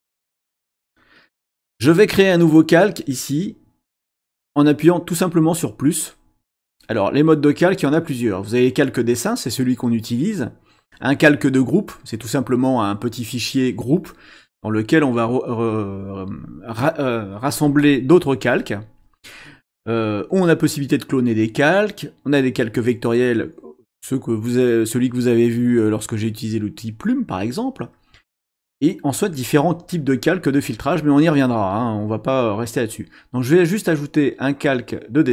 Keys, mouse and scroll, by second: 6.6 click, 34.5 click.